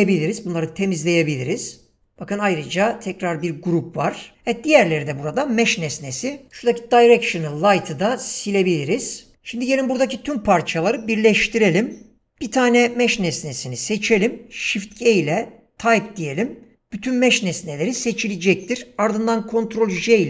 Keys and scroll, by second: 0.0 Delete, 2.7 Delete, 7.3 Delete, 14.6 shift+g, 19.9 ctrl+j.